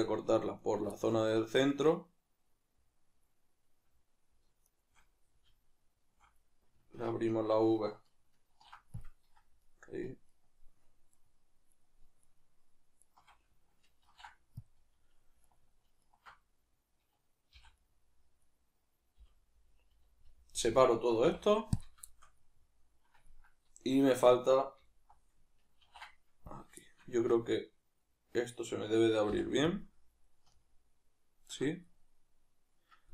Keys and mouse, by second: 0.6-0.9 alt+right drag, 0.9-4.7 middle drag, 4.7 alt+shift+right click, 8.5 ctrl+e, 9.6-12.3 alt+right drag, 14.0 ctrl+e, 15.4-16.1 alt+right drag, 17.6 v, 19.2 l, 22.1-24.9 shift+middle drag, 24.9 alt+right click, 25.8 ctrl+e, 26.8-33.1 shift+middle drag, 27.2 a.